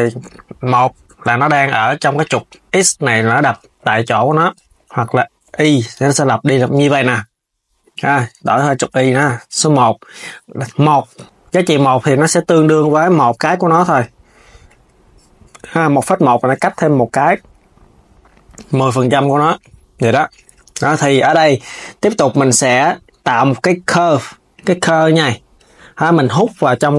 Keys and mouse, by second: 1.9-4.9 drag, 5.5 KP_3, 6.4 s, 7.5-11.4 drag, 13.1 click, 16.1-18.0 drag, 18.2 z, 18.6 click, 19.0 s, 19.6 s, 20.1 click, 21.8-24.8 drag, 26.1 click.